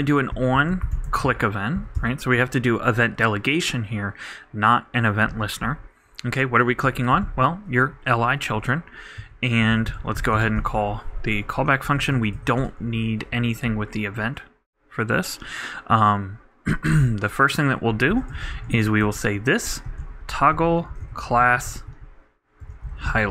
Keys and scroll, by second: 0.0-1.0 typing, 10.2-12.1 typing, 12.3 shift+Return, 17.7-19.5 typing, 20.6-22.4 typing.